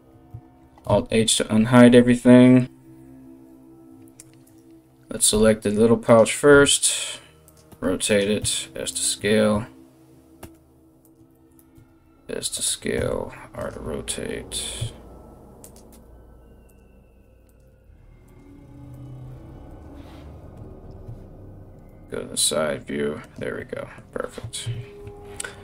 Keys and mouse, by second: 0.5 alt+h, 4.1 middle click, 4.1 right click, 4.9 g, 5.8-25.6 middle drag, 6.1 r, 7.3 r, 8.0 s, 9.1 e, 10.0 r, 11.3 s, 12.6 r, 15.5 s, 15.5 g, 16.7 r, 17.3 r, 18.1 r, 18.9 s, 20.3 ctrl+KP_3, 21.5 g, 24.2 ctrl+KP_1, 25.5 right click.